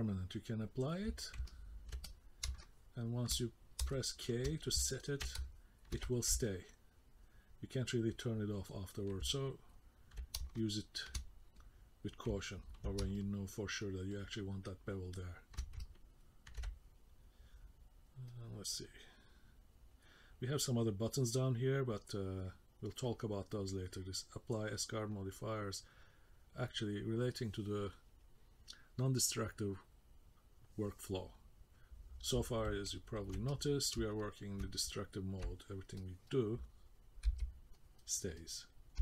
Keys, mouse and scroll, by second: 1.5 ctrl+middle click, 2.0 middle click, 2.6 shift+middle click, 3.4 middle click, 3.9 shift+middle click, 4.8 ctrl+middle click, 5.4 shift+middle click, 6.4 middle click, 8.7 middle click, 9.3 ctrl+middle click, 10.6 shift+middle click, 11.6 middle click, 12.4 ctrl+middle click, 13.1 shift+middle click, 14.1 ctrl+middle click, 15.8 ctrl+middle click, 18.3 click, 21.9 click, 26.0 click, 32.9 ctrl+middle click, 33.5 middle click, 34.1 shift+middle click, 36.0 click, 37.3 k, 37.7 click, 38.4 click.